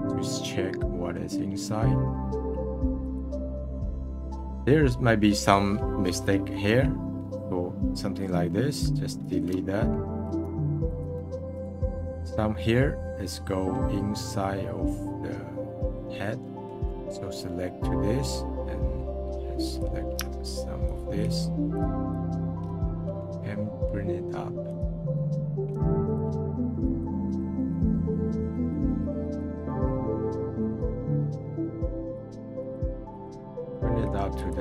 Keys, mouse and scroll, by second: 0.2-1.3 middle drag, 1.9-2.4 middle drag, 3.0 click, 3.4 scroll up 2, 4.6 scroll up 4, 5.1-5.7 scroll down 2, 10.0 d, 10.4 f, 10.9 f, 11.5-12.0 drag, 12.0 scroll down 1, 12.1-13.9 middle drag, 13.9-14.9 scroll up 4, 14.9-15.4 scroll down 1, 15.4-15.8 scroll down 3, 15.8-16.8 middle drag, 17.0-18.3 drag, 19.2-22.7 drag, 22.7-23.0 middle drag, 24.6-25.7 drag, 25.7 f, 26.2 f, 26.3-26.8 middle drag, 26.8-27.9 drag, 27.9-28.5 middle drag, 28.5-31.0 drag, 31.0-31.6 middle drag, 31.6-34.6 drag.